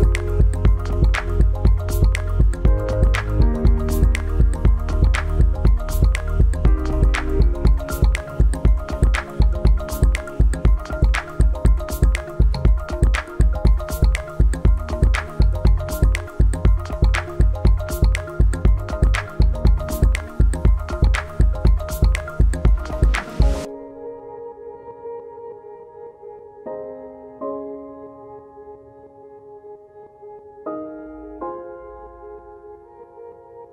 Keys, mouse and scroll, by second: 0.9 right click, 3.1 click, 7.5 click, 10.7 click, 14.8 click, 17.9 click, 20.8 click, 26.0 click, 28.8-29.8 scroll up 1, 29.8 click, 32.4 scroll up 1, 32.4 scroll down 1.